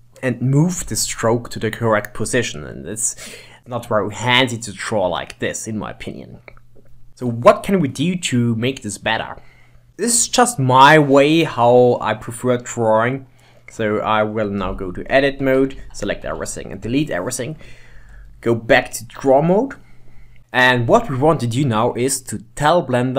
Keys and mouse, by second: 3.6-6.3 middle drag, 7.1-8.6 middle drag, 14.8 Tab, 15.5 Tab, 15.8 a, 16.3 x, 18.2 ctrl+Tab.